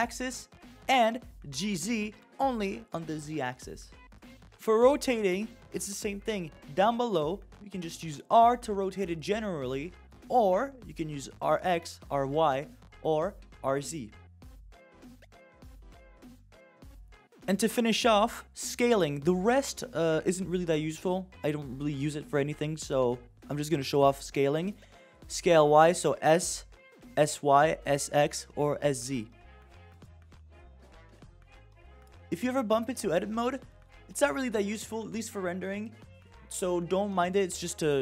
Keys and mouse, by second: 2.0 g, 6.4 click, 8.6 r, 10.5 r, 12.7 r, 14.9 r, 19.7 click, 24.0-25.5 drag, 26.3 s, 27.9 s, 29.8 s, 32.2-34.4 drag, 37.1 click.